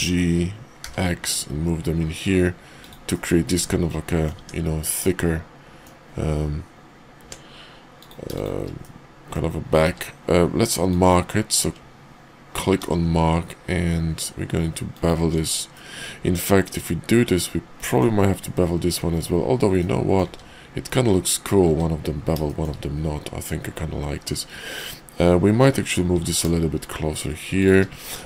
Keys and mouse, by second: 3.1-4.3 drag, 4.4 Tab, 5.0-5.8 middle drag, 7.1 Tab, 8.7 middle click, 9.7 q, 12.7 ctrl+b, 15.2 Tab, 15.7-18.0 middle drag, 19.8 middle click, 20.9 `, 21.6 `, 22.4 shift+middle click, 26.1 g, 28.1 middle click.